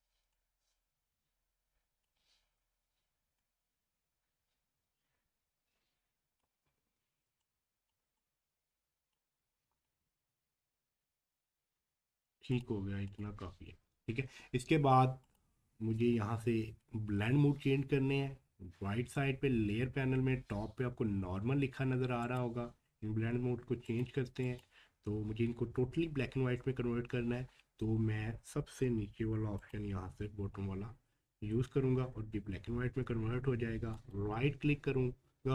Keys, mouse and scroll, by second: 3.4-6.6 alt+shift+drag, 6.6-7.0 shift+scroll up 2, 7.2 space, 7.4 click, 7.7 space, 8.2 click, 9.5 scroll down 1, 12.5 scroll down 1, 12.5 click, 22.2 click, 22.2 click, 29.6 click, 29.6 click, 33.9 right click.